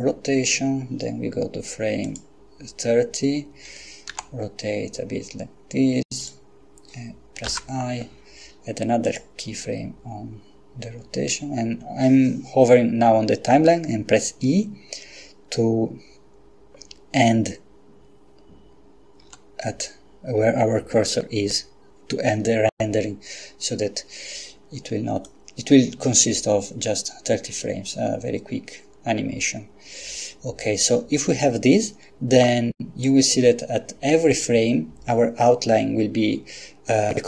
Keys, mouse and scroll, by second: 2.0 click, 4.1 r, 6.2 click, 7.5 i, 9.1 click, 19.2 e, 25.3-33.5 drag.